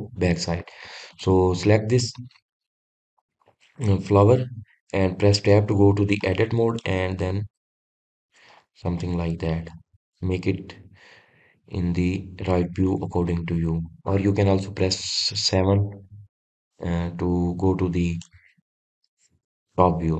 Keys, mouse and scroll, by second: 1.4-1.9 scroll down 1, 1.9 click, 7.0 middle click, 7.9 scroll up 2, 8.7 shift+middle click, 9.3-9.8 scroll up 2, 9.8 shift+middle click, 10.5-11.1 scroll up 2, 11.1-11.7 scroll down 1, 11.7-15.8 middle drag, 15.8 KP_7, 16.6-17.5 scroll down 1, 17.5 scroll up 2, 17.8-18.4 scroll down 3, 18.4-20.1 shift+middle drag.